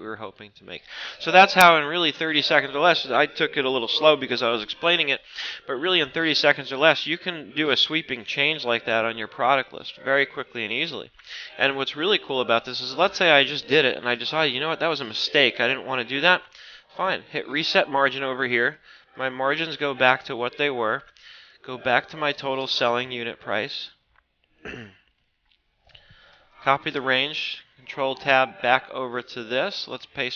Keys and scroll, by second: 25.9 ctrl+c, 27.0 ctrl+Tab, 27.8 ctrl+Up, 28.5 ctrl+Down.